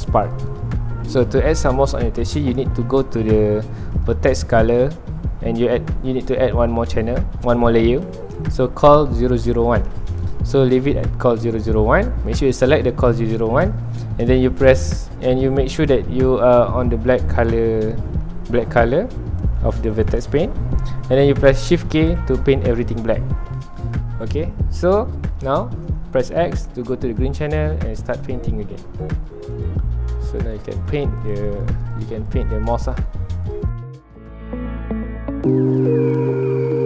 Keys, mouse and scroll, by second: 1.4 scroll down 1, 1.5 middle click, 2.0 ctrl+s, 8.1-10.0 drag, 10.0-12.2 middle drag, 12.2-13.8 drag, 13.8 middle click, 14.2 scroll up 1, 19.1 scroll down 1, 19.5 middle click, 19.9 scroll up 1, 22.1 shift+k, 23.1 scroll down 1, 23.3 middle click, 23.6-25.3 ctrl+alt+drag, 25.3-29.0 middle drag, 29.0-33.8 drag, 33.8 shift+middle click, 34.3-36.8 ctrl+alt+drag.